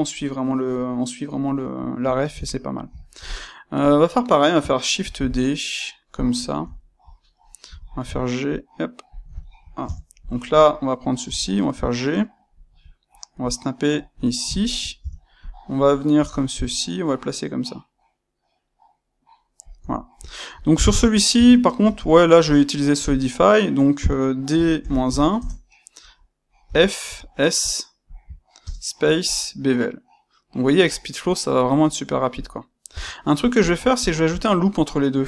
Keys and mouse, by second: 3.7 click, 4.9 shift+d, 6.1 click, 6.4-9.1 ctrl+shift+middle drag, 7.6 g, 9.1 ctrl+click, 9.3 shift+middle click, 9.7 Tab, 10.1 click, 11.1 g, 14.1 ctrl+click, 14.5 shift+middle click, 14.9 Tab, 15.3 click, 16.1 g, 19.7 click, 19.9-32.3 shift+middle drag, 21.3 Tab, 21.7 space, 32.3 click, 32.9 Tab, 33.5 click, 33.9 shift+click.